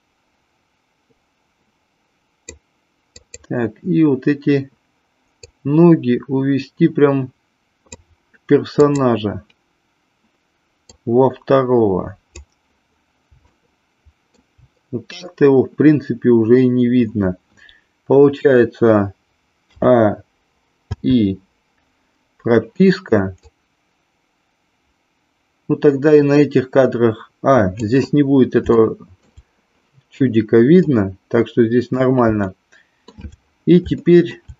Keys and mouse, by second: 0.0-2.5 drag, 3.1 click, 5.4-7.9 drag, 8.8-9.8 drag, 10.9-12.4 drag, 13.4 shift+middle click, 19.7 a, 20.9 i, 23.4-27.8 drag, 28.6 shift+middle click, 30.8-32.0 drag, 32.5 shift+middle click, 34.0 shift+middle click.